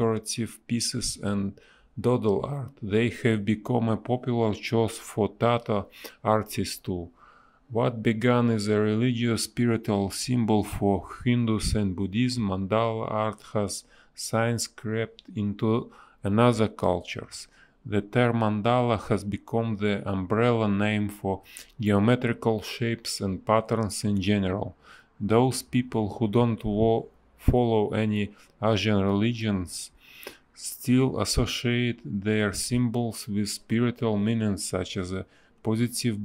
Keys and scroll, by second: 1.7 space, 3.8 b, 4.1 space, 8.5 ctrl+z, 8.5 space, 13.0 space, 16.7 space, 17.0 a, 19.7 space, 20.5 b, 22.2 a, 24.3 space, 26.3 b, 28.6 a, 30.5 space, 30.8 a, 32.0 space, 32.5 b, 34.2 ctrl+z.